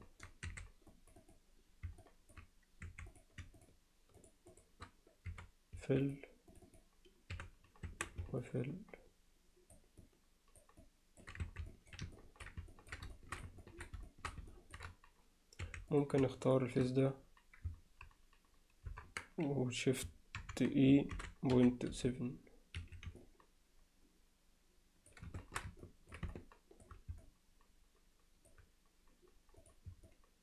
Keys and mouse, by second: 0.0 alt+middle click, 0.5 2, 0.9 click, 2.0 middle click, 2.9 1, 3.1 click, 4.2 shift+click, 4.6 shift+click, 6.7 click, 7.4 f, 7.9 Tab, 8.4-9.8 alt+middle drag, 10.0-10.6 alt+middle drag, 10.8-11.2 alt+middle drag, 11.5 Tab, 11.7 alt+middle click, 12.2 ctrl+alt+middle click, 12.7 ctrl+alt+middle click, 13.2 alt+shift+middle click, 13.6 ctrl+alt+middle click, 14.1 alt+shift+middle click, 14.5 ctrl+middle click, 15.7 3, 16.0 click, 16.5 shift+click, 18.9 ctrl+KP_Add, 20.4 ctrl+KP_Subtract, 21.2 shift+e, 23.2-25.1 alt+middle drag, 25.4 shift+middle click, 25.8 ctrl+middle click, 26.3 middle click, 27.2-28.5 alt+middle drag, 29.6 click, 30.1-30.4 alt+middle drag.